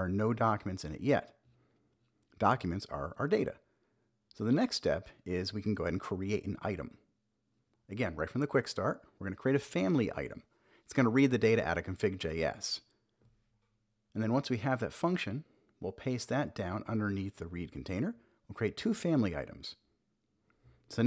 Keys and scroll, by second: 2.1 super+b, 2.7 super+j, 5.5 Return, 6.1 Return, 6.2 super+v, 7.0 super+s, 16.5 super+v, 17.1 super+s, 18.7 super+j, 19.4 Up, 20.0 Return.